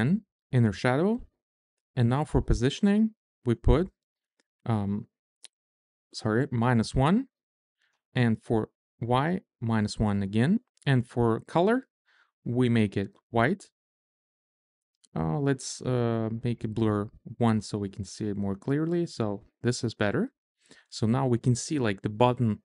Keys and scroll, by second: 2.7 0, 3.1 1, 4.7-5.8 typing, 7.7 -, 8.0 1, 9.0 Return, 10.3 Tab, 15.2 1, 16.1 Return.